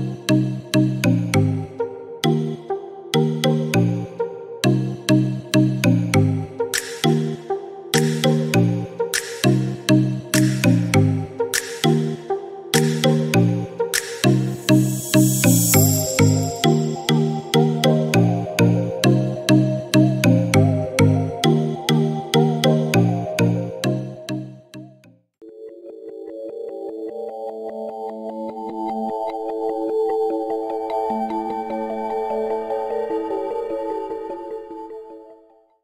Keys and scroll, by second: 8.9 1, 9.1 Return.